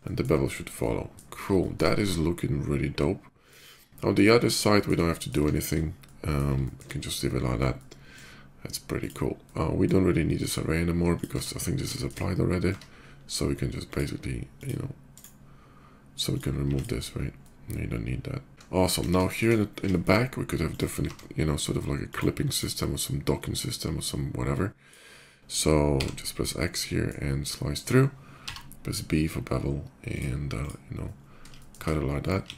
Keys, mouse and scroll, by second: 0.5-0.9 middle drag, 1.4 middle drag, 1.8-3.3 shift+middle drag, 4.5 middle click, 4.7-5.0 middle drag, 5.3 shift+middle click, 5.7-6.1 shift+middle drag, 6.4 shift+middle drag, 7.5-7.8 shift+middle drag, 8.6 shift+click, 9.2-9.6 shift+middle drag, 10.8 click, 11.1 Tab, 11.7 shift+Tab, 11.7 middle click, 12.5 Tab, 13.4 click, 14.2 click, 14.8 right click, 16.0 click, 16.5 click, 16.5 x, 17.1-18.5 middle drag, 18.7 KP_5, 19.0 middle click, 19.7 middle drag, 20.5 click, 20.7 d, 21.8 click, 22.3 click, 23.3-24.7 drag, 25.8 x, 26.3-26.8 middle drag, 28.2 b, 29.9 click, 30.3 click, 31.3 middle drag, 31.8 click.